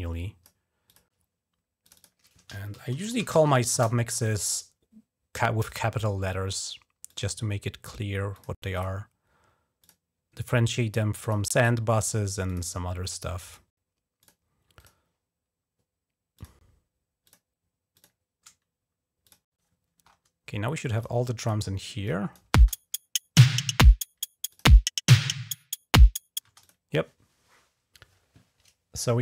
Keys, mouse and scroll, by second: 0.6 click, 1.6 click, 2.3-4.8 typing, 5.4 click, 6.9 click, 8.1 click, 8.5 click, 9.6 click, 11.0 click, 11.4 click, 12.3 click, 13.3 click, 14.0 click, 14.6 click, 16.1 click, 16.5 scroll down 1, 17.1 click, 17.8 click, 19.1 click, 19.9 scroll up 2, 20.8 click, 21.2 click, 21.9 click, 22.5 space, 23.2 click, 24.3 click, 26.3 space, 26.4 click.